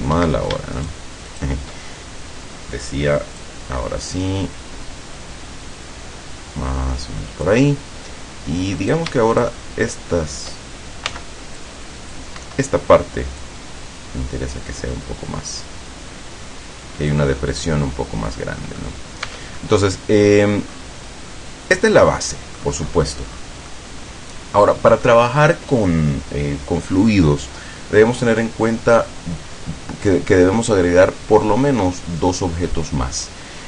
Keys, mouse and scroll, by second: 0.6 shift+Escape, 0.8 shift+right click, 1.4 shift+right click, 3.4-7.8 drag, 9.0 right click, 9.4 shift+right click, 11.2 c, 11.7 click, 13.5-17.4 drag, 17.6-19.1 drag, 19.4 Tab, 19.7-20.8 drag, 21.4-22.8 drag, 23.0 scroll up 2, 23.4 scroll down 2, 23.8-25.3 drag.